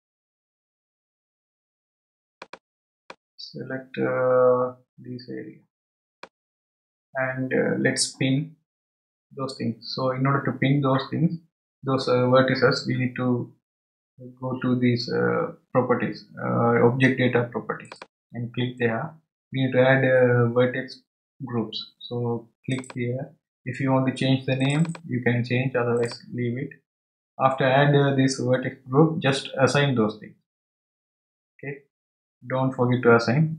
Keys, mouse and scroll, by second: 2.3 click, 3.1 click, 17.8 click, 22.7-24.7 drag, 24.8-26.1 drag.